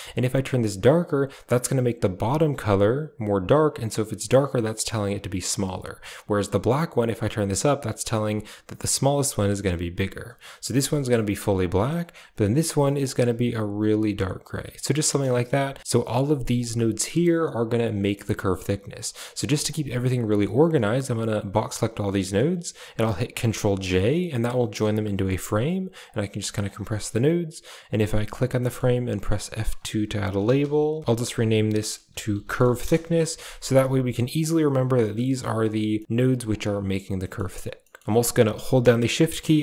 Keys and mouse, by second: 5.5 click, 6.1 click, 10.7 click, 11.3 click, 11.8 click, 15.0 middle click, 15.3 shift+middle drag, 15.8 middle click, 15.8 a, 16.6-17.6 drag, 17.9 middle click, 18.8-19.3 drag, 19.4 g, 20.2 click, 20.8-21.7 drag, 22.1 middle click, 23.2 ctrl+j, 23.8 a, 24.1 click, 25.2 click, 25.9 click, 26.5 click, 26.6 drag, 27.7 click, 28.4 middle click, 29.2 F2, 32.6 s, 33.7 a, 34.3 click, 34.6 g, 35.8 middle click, 36.2 g, 37.1 middle drag, 37.7 middle click.